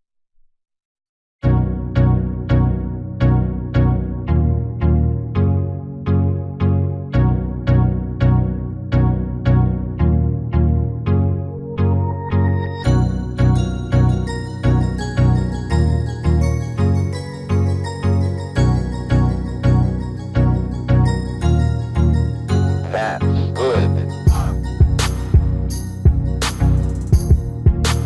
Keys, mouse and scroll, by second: 2.4 s, 4.4 KP_7, 5.7 s, 8.3 middle click, 10.1-12.2 middle drag, 11.4 s, 13.9-15.6 drag, 19.0 s, 23.5-25.4 drag, 25.6 s.